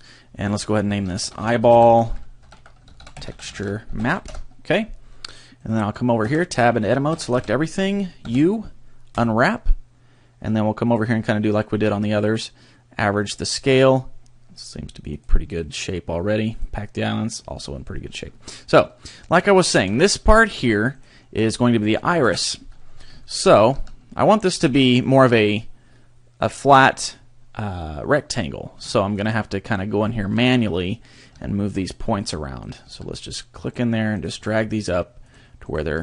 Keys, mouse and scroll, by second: 0.3 click, 5.6 right click, 6.3 Tab, 7.1 a, 7.3 a, 8.2 u, 10.9 click, 15.1 click, 15.5 click, 17.5 scroll up 3, 19.5 shift+middle click, 20.4 a, 20.5-20.9 scroll up 3, 20.9 right click, 22.2 ctrl+l, 22.9-23.3 scroll down 2, 23.3 shift+middle click, 23.7 g, 24.6 click, 24.8 shift+middle click, 28.9 shift+middle click, 29.7-30.1 scroll up 2, 30.1 shift+middle click, 31.1 right click, 31.3 g, 32.2 click, 32.6 right click, 32.8 g, 33.7 click, 34.1 right click, 34.3 g, 35.3 click, 35.7 right click, 35.8 g.